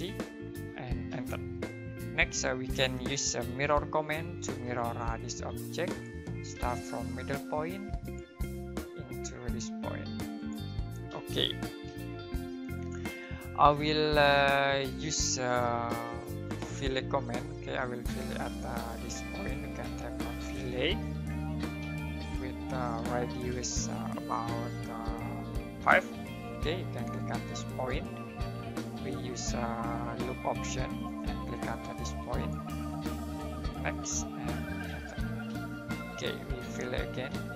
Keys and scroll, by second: 0.3-1.1 typing, 3.3-4.5 typing, 6.5 space, 9.2-10.0 typing, 19.6-21.4 typing, 22.7-23.5 typing, 25.8-26.6 typing, 28.7 space, 34.8 space, 35.5 space, 37.3 space.